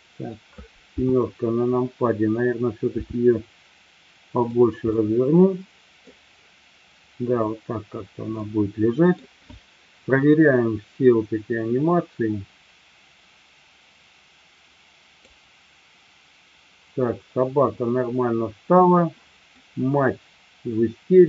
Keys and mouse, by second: 0.9 KP_7, 3.0 r, 4.4 click, 5.0-6.1 middle drag, 8.3-9.1 middle drag, 11.9-17.3 drag, 19.5-21.2 middle drag.